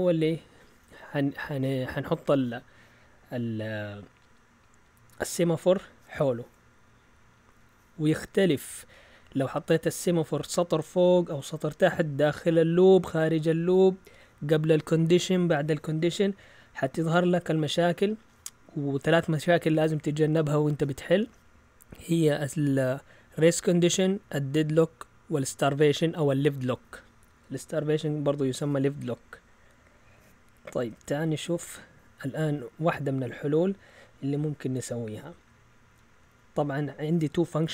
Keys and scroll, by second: 31.2 shift+super+z.